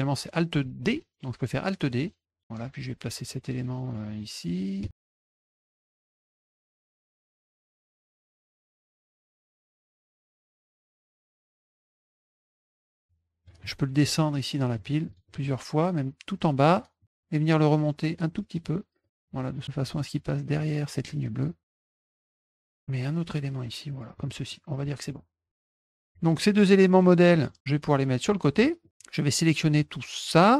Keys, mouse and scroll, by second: 2.4-8.8 drag, 4.8 space, 7.9 space, 8.8 middle click, 9.3 click, 9.9 middle click, 10.1 middle click, 10.5 middle click, 11.2 click, 11.4 click, 11.6 click, 12.1-13.4 drag, 14.7 click, 15.0 click, 15.2 click, 15.4 click, 17.0 click, 18.5 click, 19.0 click, 19.6 click, 20.6 click, 21.7 click, 21.9 middle click, 21.9 scroll, 22.3-24.1 drag, 22.4 space, 24.5 middle click, 24.5-24.8 scroll, 26.5 click, 27.0 click, 27.8 click, 28.6 middle drag, 28.9-30.5 drag.